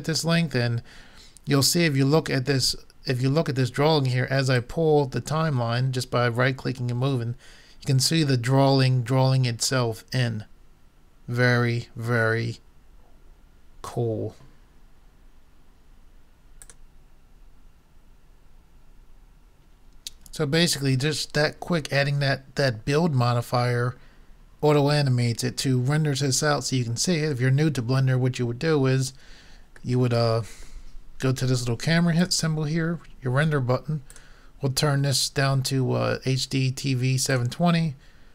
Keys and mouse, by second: 3.6-4.7 middle drag, 4.7-6.4 drag, 16.6-30.0 drag, 32.2-34.0 drag, 34.1-36.0 drag.